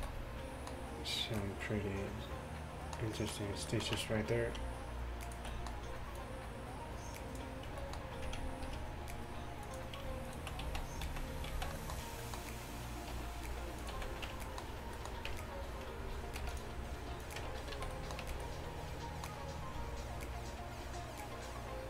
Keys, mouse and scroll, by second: 0.0 a, 0.1 middle click, 4.0 Tab, 5.3-7.4 middle drag, 7.5 click, 7.8 middle click, 8.7 ctrl+b, 10.3 click, 10.7 middle click, 10.7 z, 11.1 z, 11.5 z, 13.2 r, 14.0 z, 14.3 Tab, 15.3 Tab, 16.5 ctrl+r, 17.5 Tab, 17.8 a, 18.3 a.